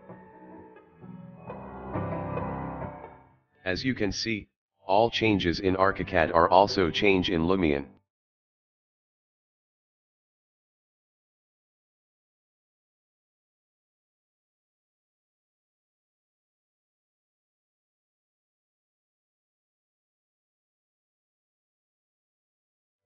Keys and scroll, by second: 1.4-2.8 typing, 5.8 Escape, 6.9 Escape, 7.4-9.5 typing, 14.1-17.0 typing, 21.4-23.0 typing.